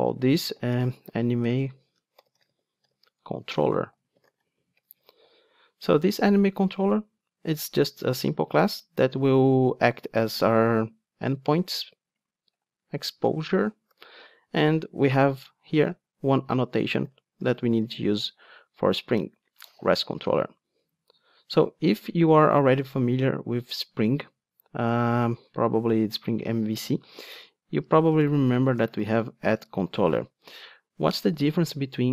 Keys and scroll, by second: 19.1 Return, 29.6 Return.